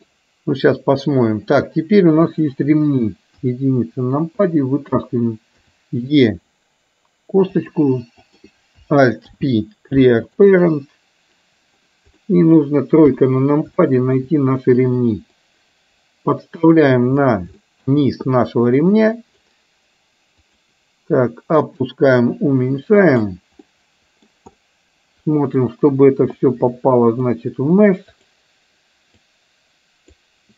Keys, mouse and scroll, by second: 2.2 click, 3.3 KP_1, 6.6 e, 8.3 click, 9.3 alt+p, 12.3 middle click, 13.7 shift+KP_3, 13.8 shift+middle click, 15.4-17.1 drag, 17.6 shift+middle click, 18.4-19.6 drag, 20.4 click, 21.9-23.2 drag, 23.7 middle click, 24.7 middle click, 26.4 click, 28.1 click, 29.4 click.